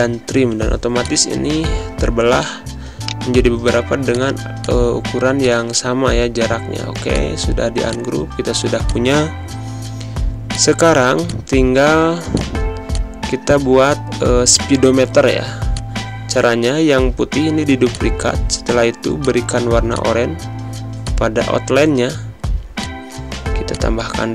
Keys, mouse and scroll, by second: 7.1 click, 7.9 click, 8.9 click, 15.7 alt+click, 18.5 click, 20.6 z, 20.9-22.7 drag, 23.3 z, 23.6 click.